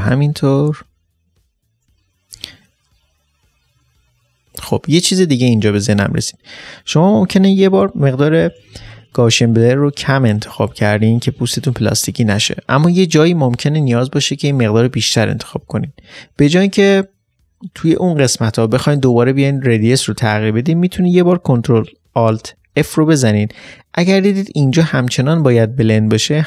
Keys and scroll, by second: 0.2-1.2 typing, 22.7 ctrl+alt+f.